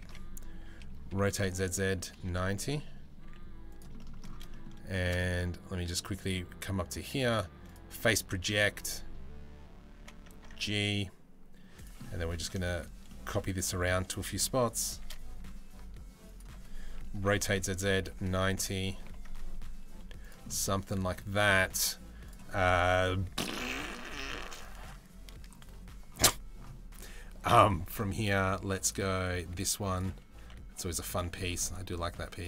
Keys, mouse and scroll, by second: 0.8 r, 2.8 s, 3.7 shift+middle click, 5.9-7.5 drag, 9.6 g, 11.6 middle click, 12.2 shift+middle click, 12.7 click, 14.6 shift+d, 16.9 r, 18.7 g, 20.1-20.5 middle drag, 20.9 middle click, 21.9 click, 28.8 click, 30.0 s, 31.0 g, 32.2 s.